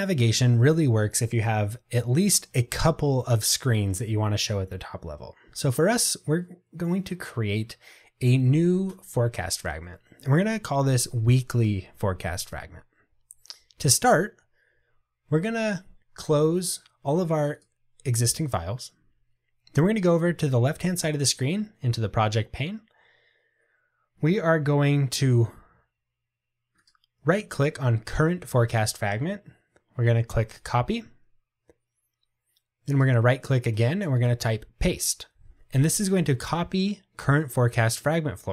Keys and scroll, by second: 30.7 super+c, 34.5 super+v.